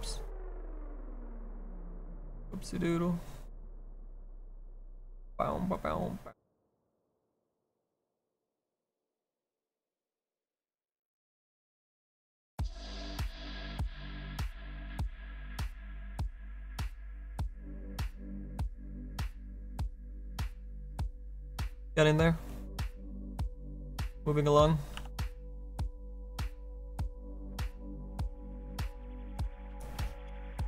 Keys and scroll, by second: 25.0 b.